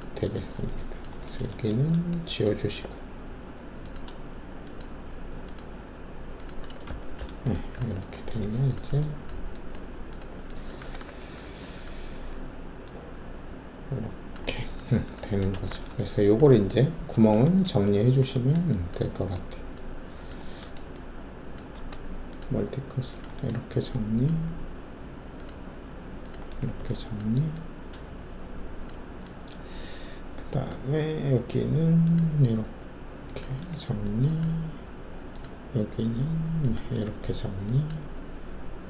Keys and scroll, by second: 2.8 alt+3, 6.8 ctrl+shift+`, 7.7 ctrl+`, 10.8 alt+w, 11.4 alt+`, 15.5 alt+shift+a, 21.7 alt+s.